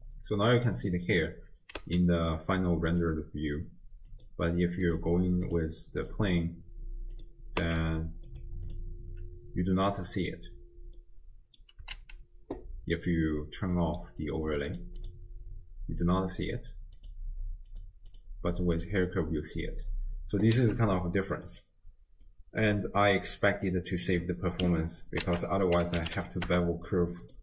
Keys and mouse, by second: 1.8 z, 4.1 click, 4.9 drag, 7.6 z, 11.0 middle click, 12.0 alt+q, 13.8 middle click, 14.7 click, 17.0 click, 18.8 click, 20.6 z, 22.3 click, 22.5 middle click, 25.3 ctrl+a.